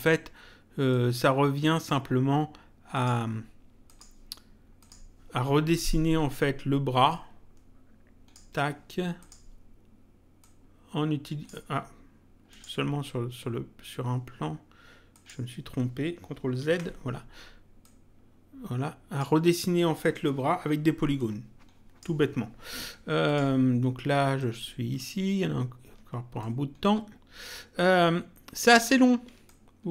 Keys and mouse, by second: 0.9 click, 2.9 click, 7.1 ctrl+click, 9.1 click, 10.3 click, 12.5 click, 15.1 click, 16.5 ctrl+z, 17.7 click, 21.1 click, 23.2 click, 24.3 click, 26.3 ctrl+click, 29.4 ctrl+click.